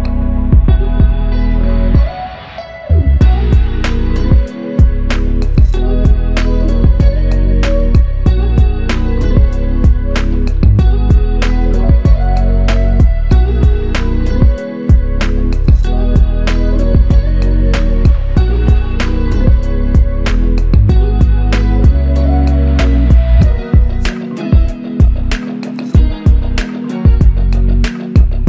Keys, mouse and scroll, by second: 12.8 ctrl+scroll down 1, 16.9 alt+click.